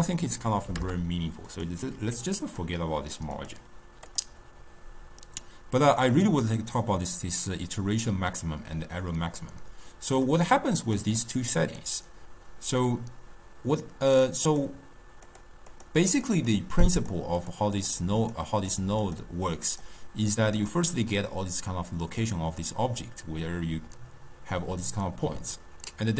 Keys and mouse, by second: 2.0 u, 5.5-8.6 middle drag, 10.3 click, 11.2-14.6 middle drag, 14.6 click, 15.3 click, 15.8 click, 16.2 click, 16.6 drag, 17.1 click, 17.4 click, 17.8 click, 18.3 click, 18.8 drag, 19.1 click, 19.8 click, 20.7 click.